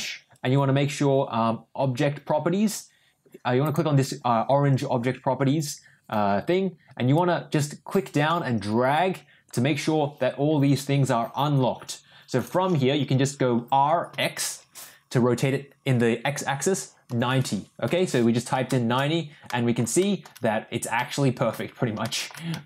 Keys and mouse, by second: 3.6 click, 7.1-9.5 drag, 13.5 r, 18.6 shift+middle drag, 19.4 middle drag, 20.0 shift+middle drag, 20.9-21.5 middle drag, 22.0 shift+middle drag, 22.5 middle click.